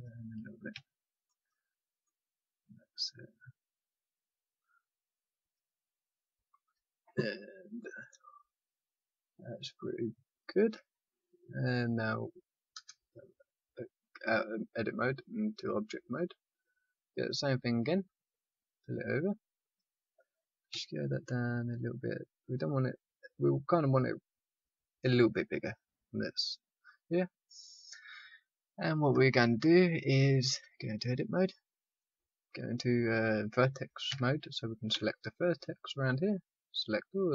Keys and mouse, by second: 0.7 a, 5.5-7.7 middle drag, 12.7 Tab, 16.4-20.6 drag, 20.6 s, 24.6-26.9 middle drag, 30.1 Tab, 32.0 right click, 32.6 click, 34.0 a, 34.9 c.